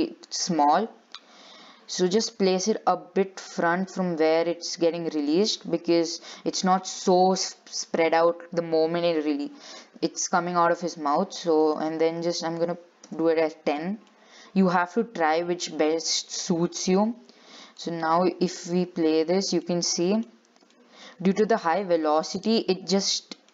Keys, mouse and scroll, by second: 2.9 g, 11.8-14.3 drag, 14.3-15.5 middle drag, 15.5-16.1 scroll down 2, 16.1 shift+middle click, 16.7-17.1 scroll up 5, 18.0-19.7 drag, 19.7 scroll up 3, 19.8 middle click, 20.5-20.9 scroll down 5, 20.9 shift+middle click, 21.5-21.9 scroll down 3, 22.2-22.7 scroll up 4, 23.3-23.5 shift+middle drag.